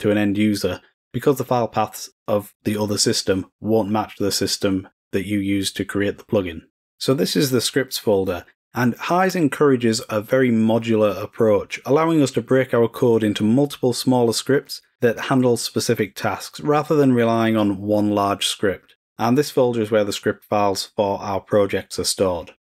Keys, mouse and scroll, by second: 7.5 click.